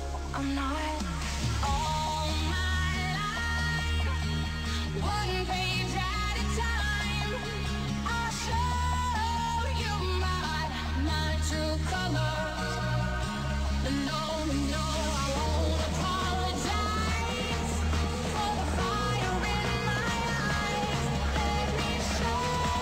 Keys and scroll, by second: 2.8 ctrl+s, 20.1 ctrl+d.